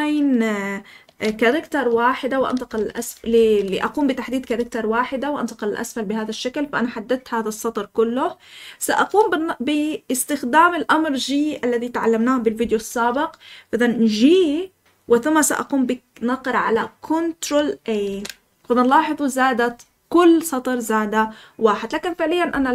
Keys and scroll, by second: 1.0 ctrl+v, 2.0-4.7 typing, 14.8 g, 18.0 ctrl+a.